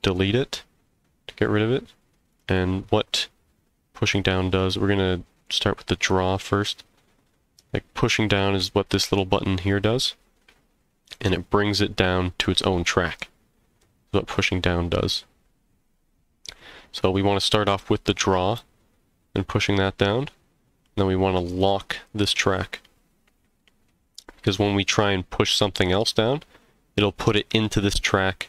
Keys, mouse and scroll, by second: 0.1 x, 2.3 click, 5.7 click, 11.1 click, 21.5 click.